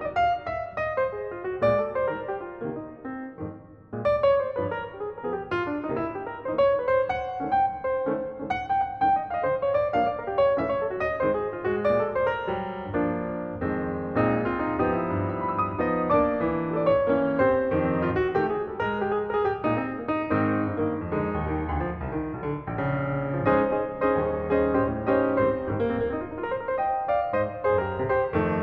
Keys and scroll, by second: 15.5 space, 17.7 shift+space, 20.0 shift+space, 22.1 shift+space, 23.5 shift+space.